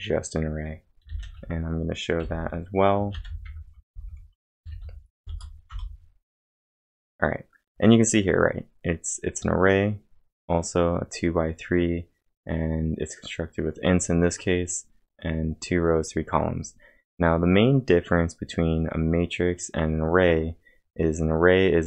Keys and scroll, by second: 0.8-5.7 typing.